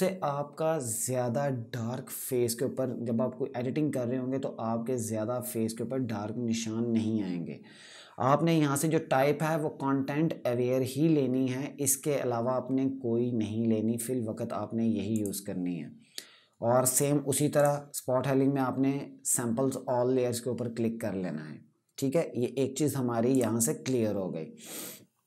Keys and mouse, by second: 14.8 click, 16.6 right click, 17.3 click, 23.0 click.